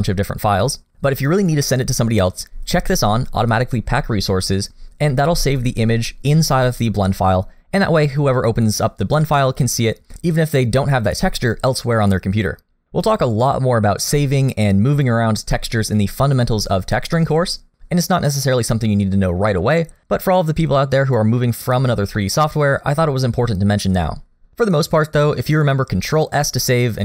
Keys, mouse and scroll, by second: 22.2 middle click.